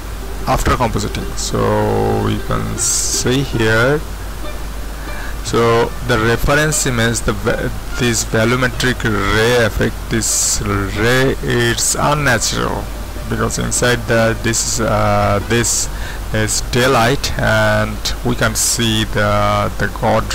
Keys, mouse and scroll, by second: 1.1-1.7 scroll up 1, 1.7-12.1 middle drag, 12.1-13.1 scroll down 1, 13.1-19.3 middle drag, 19.3-20.3 scroll up 1.